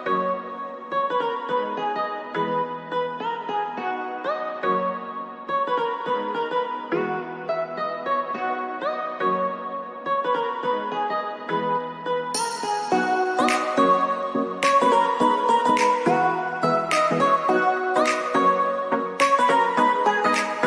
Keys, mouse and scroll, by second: 6.9-10.6 drag, 12.8 alt+scroll up 1, 14.4-17.9 drag, 17.9 scroll up 2, 18.7-20.6 drag.